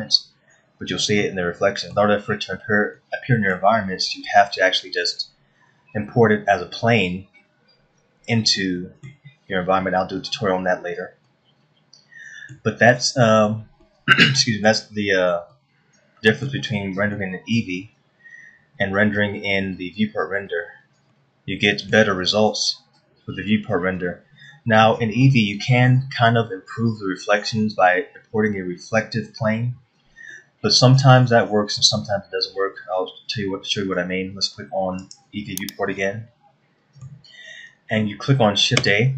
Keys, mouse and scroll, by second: 1.3-1.8 scroll up 1, 1.8 middle click, 2.9 scroll down 1, 3.6 middle click, 9.2 middle click, 11.9 middle click, 13.4-13.8 scroll up 1, 14.0-14.4 scroll up 1, 14.4 middle click, 16.1 middle click, 18.1 middle click, 21.7 middle click, 23.1-23.5 scroll up 1, 25.4 middle click, 27.6-28.1 scroll down 1, 30.9 middle click, 35.6 click, 36.5 middle click.